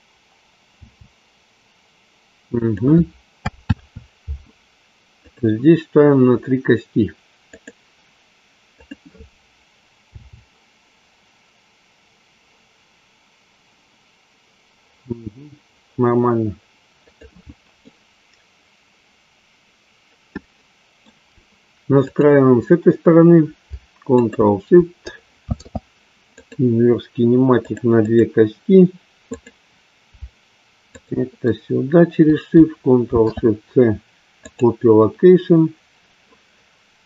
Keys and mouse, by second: 0.8 g, 3.8 ctrl+z, 5.1-6.4 drag, 7.5 click, 8.9 click, 10.1 g, 17.0 click, 17.9-21.1 middle drag, 22.0 click, 24.1 shift+click, 28.0 ctrl+shift+click, 29.3 click, 31.0-31.7 shift+drag.